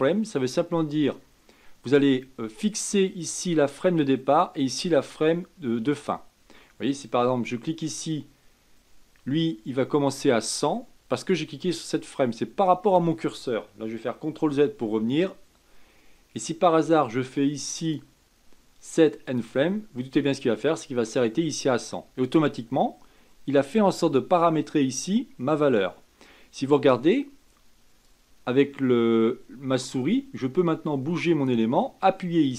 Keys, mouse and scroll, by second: 14.4 ctrl+z, 17.8-20.8 drag, 28.0-31.1 drag.